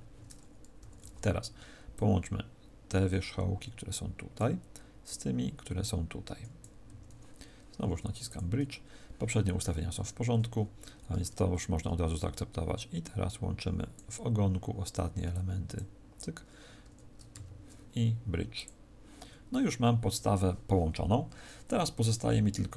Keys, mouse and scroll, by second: 8.2 click, 18.4 click.